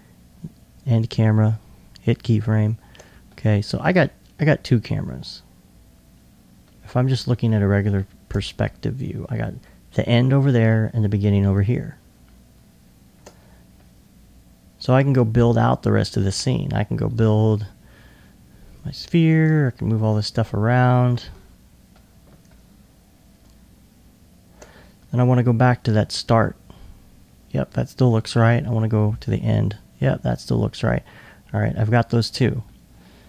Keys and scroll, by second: 8.5 alt+2, 9.2 alt+2, 20.3 super+2, 21.0-21.8 typing.